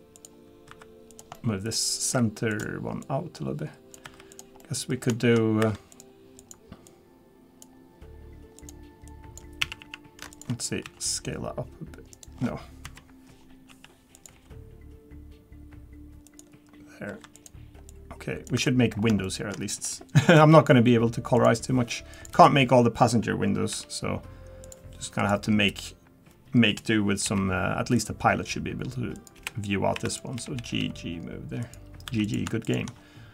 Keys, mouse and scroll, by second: 0.7 3, 1.1 click, 1.3 middle click, 2.1 1, 2.5 click, 3.0 click, 4.0 3, 4.3 click, 4.6 middle click, 5.1 shift+middle click, 5.6 2, 5.9 click, 6.4 click, 9.6 a, 9.8 a, 10.3 alt+shift+click, 10.8 s, 12.8 KP_3, 13.7 s, 14.3 g, 17.3 click, 17.3 2, 17.9 click, 18.5 3, 18.6 middle click, 18.9 scroll up 3, 19.2 shift+middle click, 20.4 k, 30.1 click, 30.4 g, 32.1 3, 32.2 click, 32.6 shift+click.